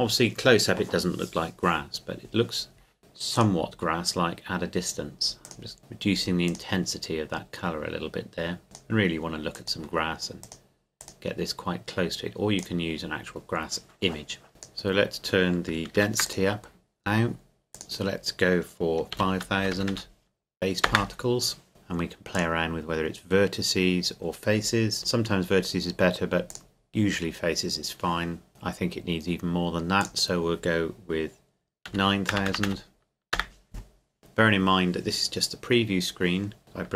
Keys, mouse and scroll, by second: 3.4 click, 15.9 ctrl+s, 16.2 click, 19.1 KP_5, 19.6 KP_0, 20.9 KP_Enter, 22.4 click, 26.5 click, 30.0 click, 31.9 KP_9, 33.4 KP_Enter.